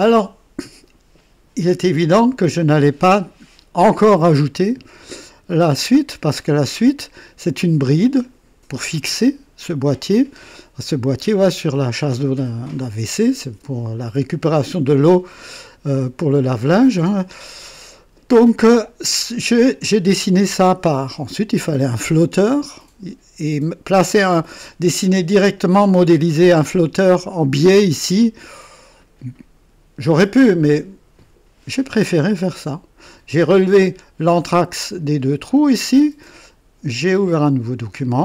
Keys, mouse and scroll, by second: 5.6 click, 10.9-11.7 drag, 16.6-17.4 right drag, 20.9-21.2 scroll down 1, 21.5 right click, 34.2-35.2 drag, 37.0 click, 38.1 scroll up 2.